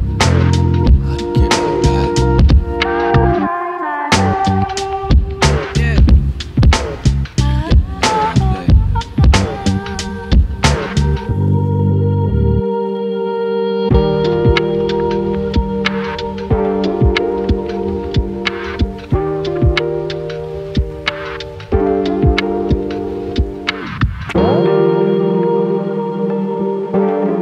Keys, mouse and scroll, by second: 0.9 alt+shift+click, 1.9 e, 4.8-6.2 shift+middle drag, 6.2 click, 6.8 g, 8.5 g, 9.5 click, 9.7 g, 10.9 click, 11.0 g, 11.9 click, 12.1 g, 13.0 click, 13.2 g, 14.9-16.3 shift+middle drag, 16.3 click, 16.9 g, 18.1-19.7 drag, 19.7 g, 21.4 click, 21.6 g, 24.5 click, 24.8 g, 26.3 click, 26.5 g.